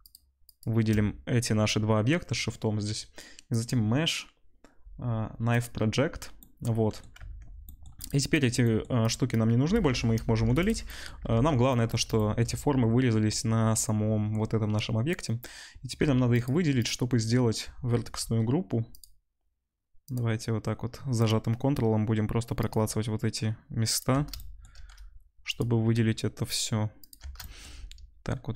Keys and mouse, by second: 0.5 shift+middle click, 0.6-3.5 shift+drag, 3.5-9.0 middle drag, 7.1 Tab, 9.0 drag, 9.3-10.6 middle drag, 10.3 Delete, 10.6-16.4 drag, 11.2 Tab, 15.9 2, 16.4 middle click, 16.4-20.0 drag, 20.0 ctrl+middle click, 20.1-25.3 ctrl+drag, 25.3-27.3 ctrl+middle drag, 27.3 shift+click, 27.4-28.5 shift+middle drag.